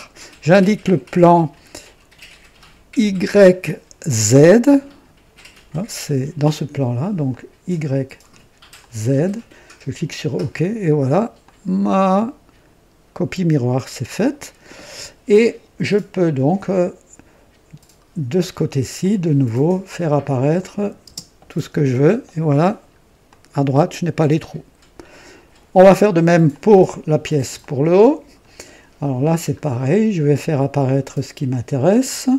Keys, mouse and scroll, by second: 7.2 click, 8.7 click, 10.0 click, 11.3-14.4 drag, 18.9 click, 19.6-19.9 scroll down 1, 20.5 click, 21.0 space, 21.7 click, 22.6 scroll down 2, 23.2-25.7 drag, 26.4 click, 27.5-28.5 drag, 29.5 scroll up 1.